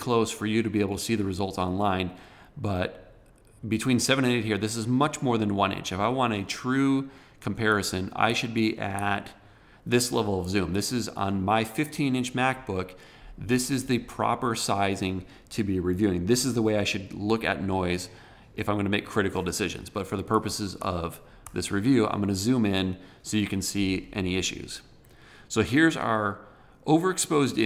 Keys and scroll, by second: 7.5 super+-, 20.1 super+=.